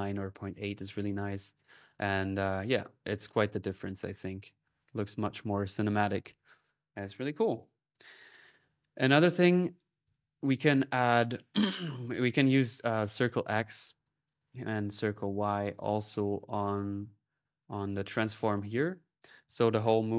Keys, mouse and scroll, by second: 0.7 middle click, 0.9-1.6 typing, 1.2 click, 2.5 click, 2.9 click, 3.2-4.3 drag, 4.7 ctrl+s, 4.7-6.1 ctrl+drag, 7.8-9.0 drag, 9.8-11.0 drag, 12.5-14.2 drag, 15.1-18.1 drag, 18.4-19.5 drag.